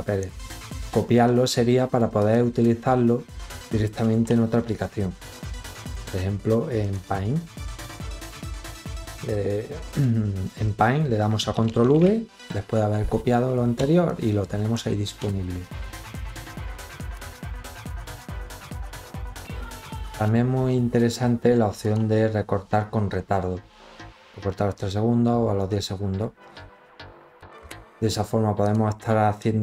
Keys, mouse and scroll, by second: 1.7 click, 5.4 click, 6.3 click, 8.4 click, 9.4 click, 11.2 ctrl+v, 13.6 click, 15.6 click, 16.6 click, 21.2 click, 27.8 click.